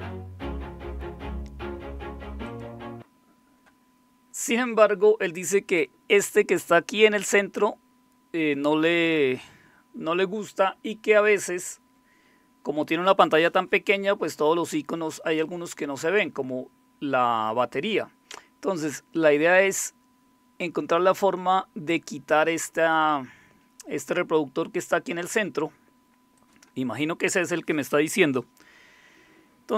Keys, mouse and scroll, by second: 2.4 click, 26.4 click.